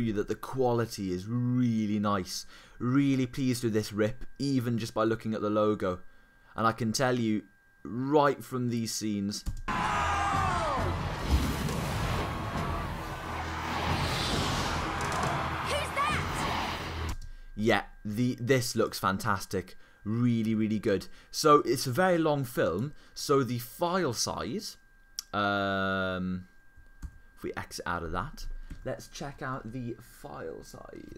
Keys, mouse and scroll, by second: 17.6 click, 18.9 click, 27.0 super+f, 28.7 super+q.